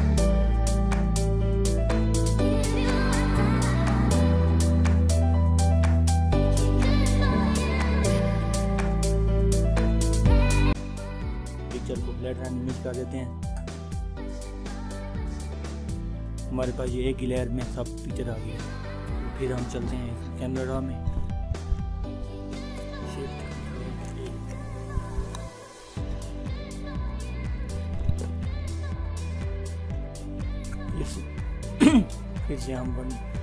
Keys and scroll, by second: 23.8 ctrl+shift+a.